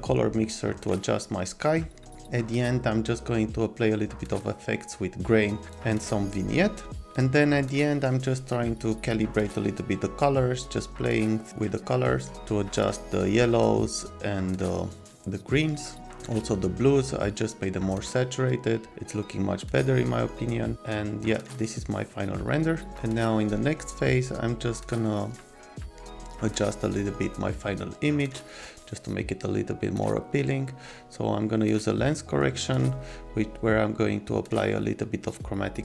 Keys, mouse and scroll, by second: 0.8 click, 6.0 click, 6.8 click, 8.9 click, 10.7 click, 13.3 click, 14.1 click, 14.4 click, 15.0 click, 16.0 click, 17.1 click, 17.3 click, 18.4 click, 18.9 click, 19.8 click, 19.9 click, 20.3 click, 21.2 click, 21.8 click, 23.5 click, 23.6 click.